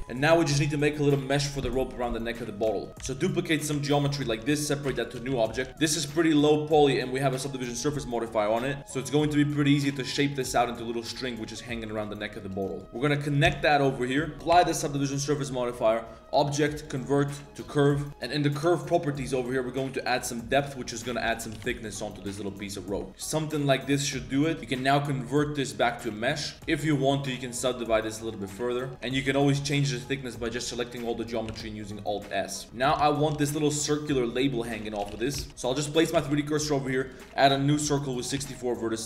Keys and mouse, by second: 0.0 Tab, 0.1 click, 0.9 click, 2.0 click, 2.6 1, 2.9 Tab, 2.9 click, 2.9 z, 3.1 shift+d, 3.8 shift+s, 4.9 p, 5.3 Tab, 5.5 click, 5.7 Tab, 5.7 z, 5.7 a, 8.0 click, 8.8 click, 8.8 g, 9.3 g, 9.8 right click, 10.0-10.4 middle drag, 10.5 g, 10.9 click, 11.2 g, 11.6 click, 11.7 g, 12.1 middle click, 12.7 click, 12.8 shift+g, 13.0 shift+click, 13.2 click, 13.5 f, 13.6 click, 13.6 middle click, 14.0 Tab, 14.0 click, 14.0 middle click, 14.5 ctrl+a, 15.8-17.7 drag, 18.8 click, 20.6 click, 21.5 z, 21.6 shift+click, 22.1 g, 26.6 ctrl+z, 26.6 ctrl+1, 27.4 click, 28.9 Tab, 28.9 KP_Decimal, 29.3 shift+middle click, 29.7 a, 30.0 shift+click, 30.5 z, 31.5 alt+s, 32.3 shift+middle click, 32.7 Tab, 32.7 KP_3, 32.7 z, 32.7 1, 33.3 z, 35.0-36.3 typing, 36.1 Tab, 37.9 click.